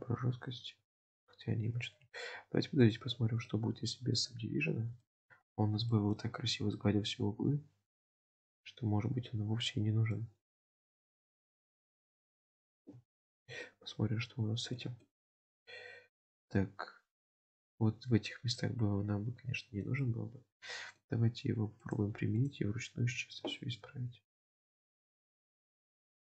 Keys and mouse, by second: 1.5 ctrl+z, 3.0 click, 3.5 middle click, 4.4 Tab, 5.1 shift+middle drag, 6.0 shift+middle drag, 6.8-10.1 middle drag, 10.9 shift+middle click, 11.3-12.8 middle drag, 13.2 shift+middle drag, 13.7-14.8 middle drag, 15.1 shift+middle click, 15.7 Tab, 18.0 Tab, 19.7 shift+middle click, 20.1-21.1 middle drag, 21.9-22.6 drag, 23.6 shift+middle click, 24.6 shift+middle click.